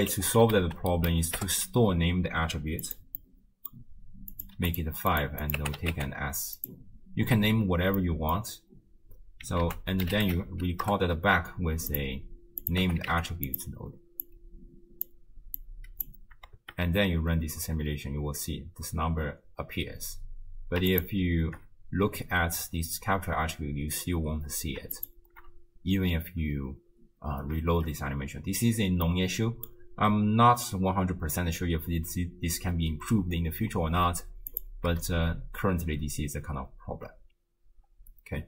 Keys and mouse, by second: 3.2 middle click, 4.4 click, 5.2-6.8 drag, 8.0 middle click, 9.7 ctrl+a, 12.6-13.6 drag, 14.2-15.1 drag, 15.6 click, 16.6 shift+space, 18.1 space, 21.0 ctrl+shift+click, 25.0 ctrl+shift+click, 27.7 shift+space, 29.0 middle click, 34.5 click.